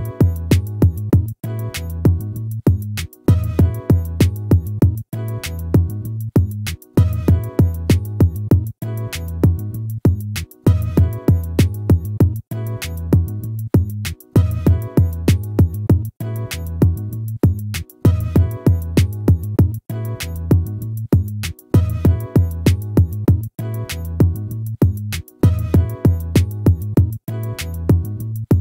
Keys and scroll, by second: 20.8 ctrl+z.